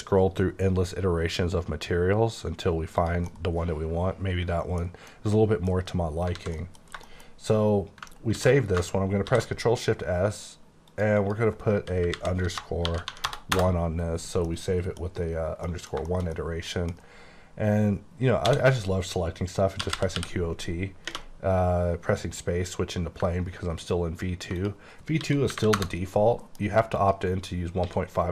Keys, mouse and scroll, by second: 0.2 scroll up 3, 0.8-1.1 scroll up 2, 1.8-3.0 scroll up 4, 3.0 click, 3.3 middle click, 5.1 middle click, 6.4 alt+a, 6.6 alt+middle click, 6.9 scroll down 2, 7.1 shift+middle click, 8.1 ctrl+middle click, 8.4 ctrl+s, 10.9 click, 11.2 double click, 12.1 Left, 12.6 BackSpace, 12.8 shift+-, 13.1 1, 13.2 Return, 13.5 Return, 14.5 middle click, 15.7 middle click, 16.1 shift+middle click, 16.7 middle click, 18.4 a, 19.8 typing, 22.2 click, 23.3 ctrl+click, 23.5 ctrl+scroll down 2, 24.1-24.6 ctrl+scroll up 1, 24.6 ctrl+click, 25.3 s, 25.5 KP_8, 25.6 KP_0, 25.8 KP_Enter, 26.5 m, 26.9 click, 27.9 s.